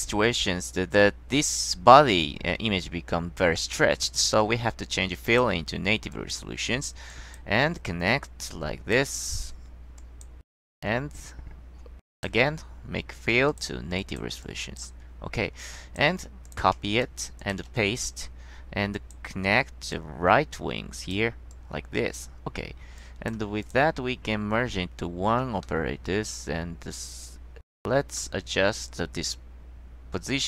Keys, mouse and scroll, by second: 3.8 click, 5.4 click, 6.2 click, 7.2 click, 8.4-9.1 drag, 10.1 click, 10.8 click, 11.2 middle click, 12.3 click, 13.6 click, 14.1 click, 14.6 click, 15.7 click, 16.6 click, 17.0 ctrl+z, 17.5 click, 17.8 ctrl+x, 19.1 click, 20.1-21.3 drag, 21.6-22.3 drag, 23.1 click, 23.7-24.1 drag, 25.8-27.7 drag, 27.7 middle click, 28.3-30.4 middle drag.